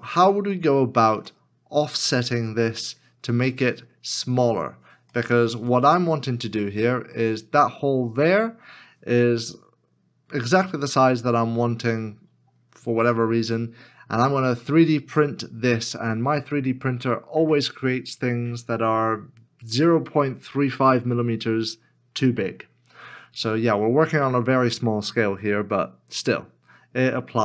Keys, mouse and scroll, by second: 0.5 shift+middle click, 5.1 shift+middle click.